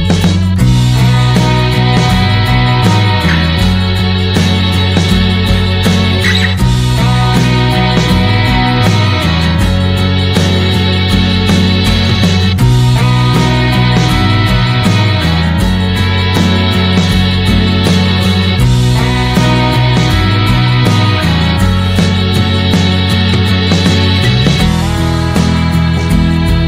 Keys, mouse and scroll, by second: 0.9-5.0 middle drag, 5.0 click, 5.1-7.0 middle drag, 7.0-8.1 drag, 8.1-14.5 middle drag, 14.5-16.5 drag, 16.5 middle click, 17.0 ctrl+shift+click, 17.7-18.7 drag, 21.1-22.2 middle drag, 22.2-24.0 scroll up 3, 24.0-24.4 scroll up 1, 24.4-26.4 drag.